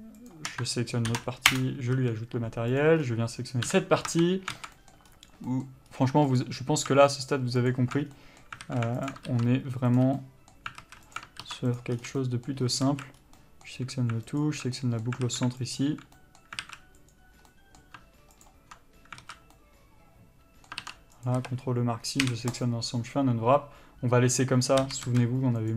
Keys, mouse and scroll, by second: 0.5 shift+click, 1.8 ctrl+l, 1.9 Return, 2.2 a, 3.0 click, 3.3 scroll down 1, 3.9 KP_Divide, 4.3 Tab, 4.8 alt+a, 5.0 middle click, 5.3-5.7 scroll up 1, 5.7 middle click, 6.1-6.6 scroll up 1, 6.6 alt+click, 7.4 alt+shift+click, 8.3 scroll down 1, 8.4 middle click, 8.9 alt+a, 9.3 alt+click, 10.2 ctrl+e, 10.4 middle click, 11.0 alt+a, 11.4 alt+click, 12.0 ctrl+e, 12.2 scroll down 1, 12.3 a, 12.4 middle click, 13.1 alt+a, 13.4 scroll up 1, 13.6 middle click, 14.6 alt+click, 15.0 middle click, 15.5 alt+a, 16.0 alt+click, 16.4 middle click, 16.9 alt+a, 17.2 click, 17.7 middle click, 18.7 ctrl+click, 19.4 alt+z, 19.8 middle click, 21.5 ctrl+e, 21.6 a, 23.0 u, 25.1 a, 25.3 s.